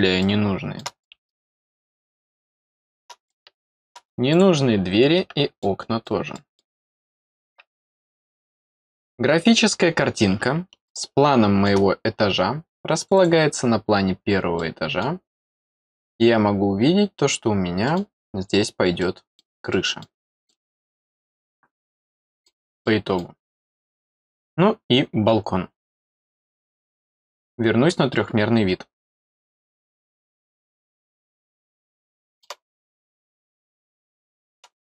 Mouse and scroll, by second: 0.2 middle click, 1.0 middle click, 1.6 middle click, 2.2 middle click, 3.2 middle click, 4.3 click, 5.6 middle click, 6.3 middle click, 7.0 click, 9.4 middle click, 10.8 middle click, 13.0 click, 13.1 click, 13.9 scroll down 1, 14.5 middle click, 15.6 middle click, 16.6 scroll down 2, 17.8 middle click, 19.0 middle click, 19.7 middle click, 20.2 middle click, 20.5-21.0 scroll down 2, 21.0-22.4 middle drag, 22.8 middle click, 30.2 click, 31.0-32.4 middle drag, 32.6 middle click, 33.5-34.8 middle drag, 34.8 scroll down 1.